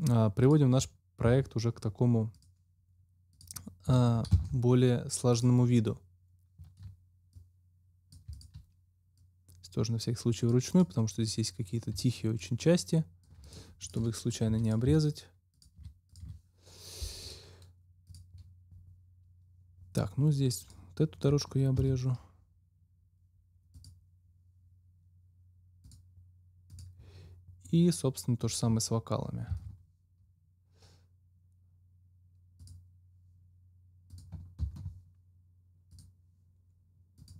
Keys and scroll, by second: 1.2 ctrl+x, 4.2 ctrl+x, 14.4 Delete, 21.7 ctrl+x, 29.4 ctrl+x, 34.5 ctrl+x.